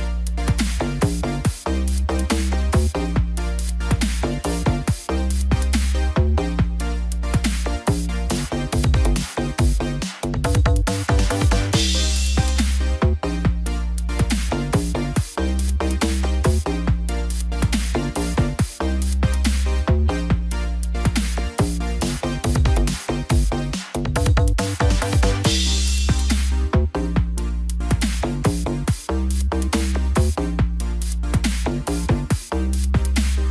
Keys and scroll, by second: 25.7 shift+F5.